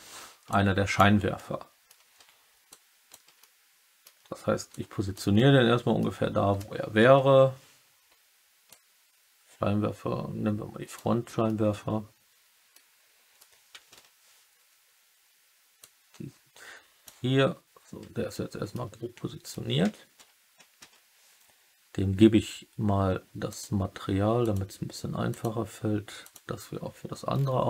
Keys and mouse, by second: 0.5 click, 1.3-1.8 alt+middle drag, 2.6 click, 3.3 alt+middle click, 4.6 click, 5.3-5.9 alt+middle drag, 7.2 KP_3, 8.6-10.9 drag, 11.4-12.7 middle drag, 13.9 KP_3, 15.8-17.0 drag, 18.2 alt+drag, 18.4 alt+middle click, 20.1 KP_3, 20.7 KP_1, 23.4 click, 24.3 click, 25.3 click.